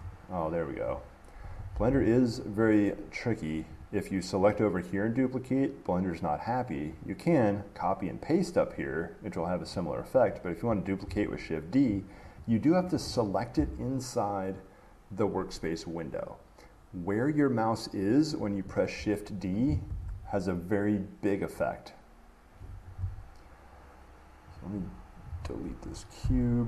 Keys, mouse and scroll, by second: 1.1 click, 1.1 d, 1.9 ctrl+z, 4.1 click, 4.7 click, 7.2-9.6 right drag, 9.9-16.3 drag, 19.9 click, 23.0 Escape, 24.8 click, 26.0 Delete.